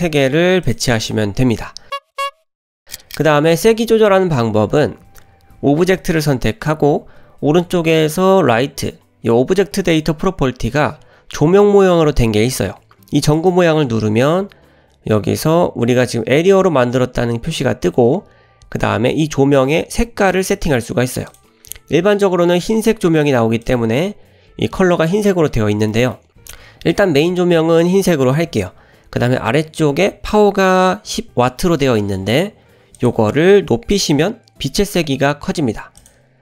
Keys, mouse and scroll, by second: 0.6 click, 3.0 click, 13.4 click, 21.3 click, 21.8-22.1 middle drag, 22.3-23.1 scroll up 1, 23.1 click, 23.7 click, 25.9-26.2 shift+middle drag, 26.9-27.3 drag, 33.0-36.3 drag.